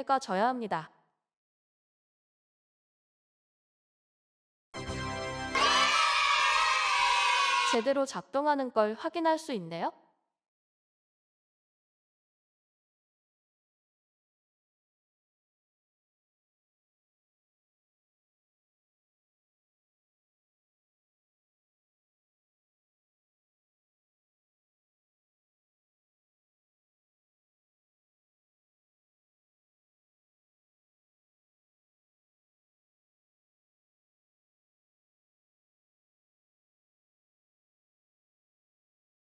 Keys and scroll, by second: 0.0-5.0 typing, 8.9-9.8 typing, 24.8-26.0 typing, 27.2 e, 28.4-31.6 typing, 33.5-36.1 typing, 37.4 ctrl+s.